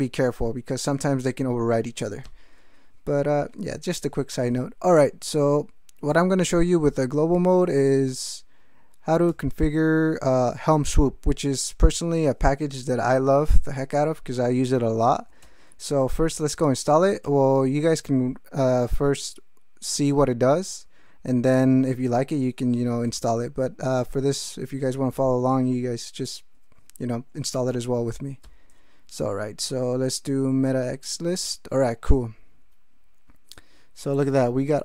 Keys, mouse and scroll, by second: 9.3 alt+x, 10.7 ctrl+g, 15.4 alt+x, 15.9 alt+l, 16.0 alt+i, 16.1 alt+t, 16.3 alt+-, 16.6 alt+p, 16.6 alt+a, 17.2 alt+Tab, 27.5 Return.